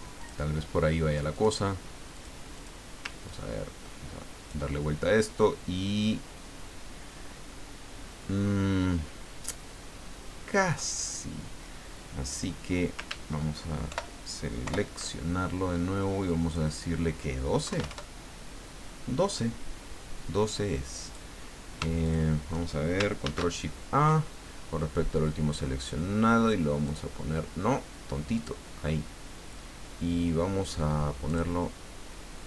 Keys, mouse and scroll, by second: 0.2 click, 1.3 click, 2.1 click, 2.5 click, 3.3-11.1 ctrl+drag, 12.3 click, 13.9 ctrl+shift+End, 14.6 ctrl+shift+Home, 16.2 click, 17.6 KP_1, 17.7 KP_2, 17.9 KP_Enter, 21.0 click, 22.0 shift+click, 23.2 ctrl+shift+a, 26.8 click, 28.3 click, 31.3 click.